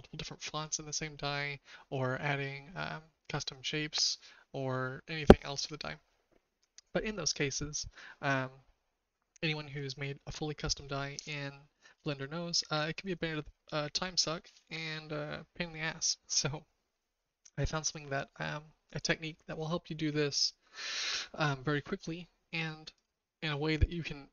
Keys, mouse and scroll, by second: 22.9 click.